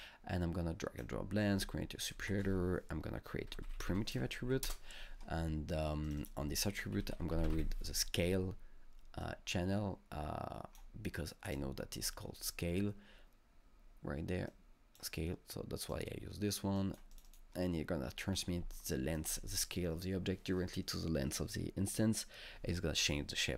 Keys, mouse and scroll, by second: 2.3 ctrl+space, 3.3-4.4 typing, 3.7 click, 4.4 Up, 4.7 Return, 6.1 click, 6.2 double click, 6.2 double click, 6.7-8.1 typing, 9.2 click, 9.5-12.0 drag, 9.5 typing, 12.0-14.5 drag, 14.5-15.8 drag, 15.8 click, 16.8 click, 17.3-18.3 drag, 18.3 scroll down 1, 18.8-21.7 alt+middle drag.